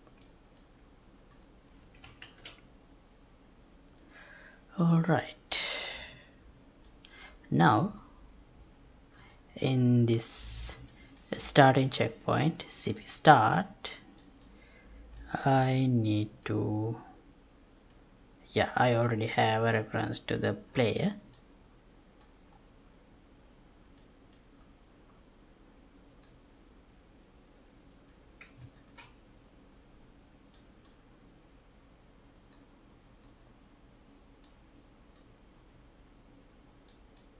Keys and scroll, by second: 2.2 ctrl+shift+s.